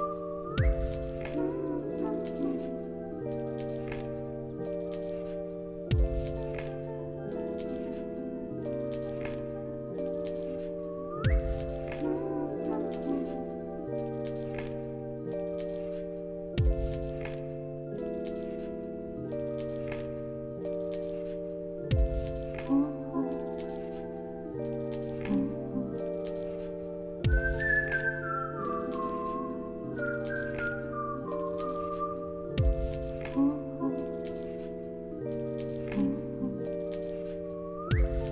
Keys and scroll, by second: 1.8 x, 3.8-5.1 typing, 6.5 x, 9.6-13.0 typing, 13.5 Return, 14.2 x, 16.0-18.8 typing, 22.4 ctrl+s, 24.2 F9, 32.3 space.